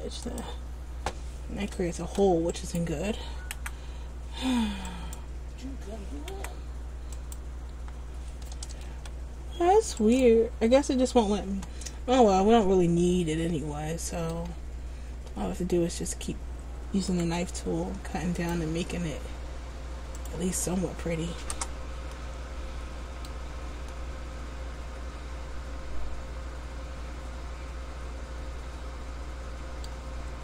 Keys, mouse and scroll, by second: 2.2 ctrl+z, 2.7 right click, 3.7 Delete, 9.1 ctrl+z, 10.2 right click, 12.0 middle click, 17.2 k, 22.3 middle click.